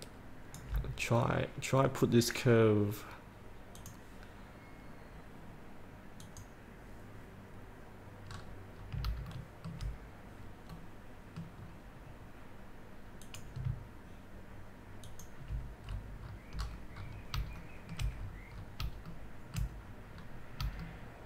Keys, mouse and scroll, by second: 1.3-2.8 scroll down 1, 2.9-4.0 scroll down 1, 4.0 click, 8.5-9.2 scroll up 1, 9.5 shift+middle click, 10.8-11.2 scroll up 1, 11.2 middle click, 11.8-13.5 scroll down 1, 13.5 click, 15.3 ctrl+click, 16.2 scroll up 1, 17.8 shift+middle click, 18.4 scroll up 1, 19.3 shift+middle click, 20.1-20.5 scroll up 1, 21.0 shift+middle click.